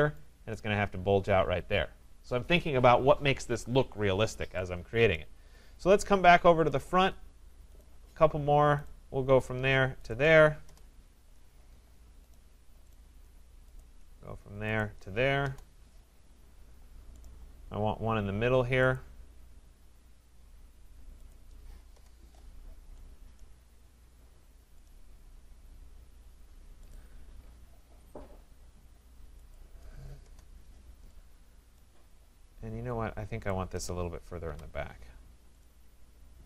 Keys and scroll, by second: 10.6 Return, 21.9 Return, 30.2 Return, 34.4 Delete.